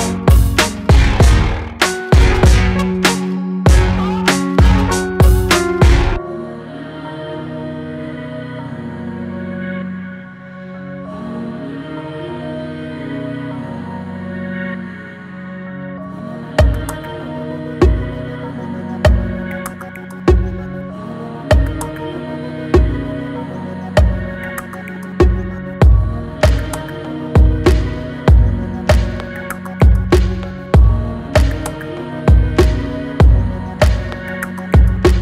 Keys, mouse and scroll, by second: 0.7-2.7 middle drag, 3.7 ctrl+z, 4.9-6.3 drag, 6.3 s, 7.3 scroll down 2, 7.5 Tab, 7.7-8.2 middle drag, 8.2 drag, 8.5-8.9 middle drag, 8.9 scroll down 1, 9.2-9.5 middle drag, 9.5 scroll down 1, 9.7-11.8 middle drag, 11.8-12.4 scroll up 5, 12.4 click, 12.6 Tab, 12.9 click, 13.8 click, 14.3 click, 14.7 shift+click, 15.3 click, 16.1 e, 21.4 Tab, 21.7 click, 21.9 scroll down 2, 22.2-23.6 middle drag, 23.6 scroll up 2, 23.9-25.5 shift+middle drag, 25.5 scroll down 1, 26.3 drag, 28.0 g, 28.9 shift+click, 29.9 ctrl+j, 30.9 click, 32.6 shift+d, 34.1 alt+middle click, 34.5 scroll up 3, 34.8-35.2 shift+middle drag.